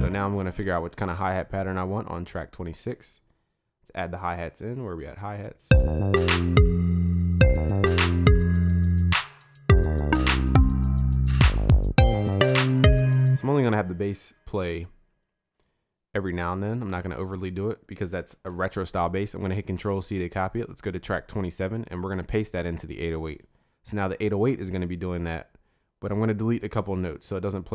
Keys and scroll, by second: 14.5 ctrl+s, 18.8 ctrl+c, 22.3 ctrl+v.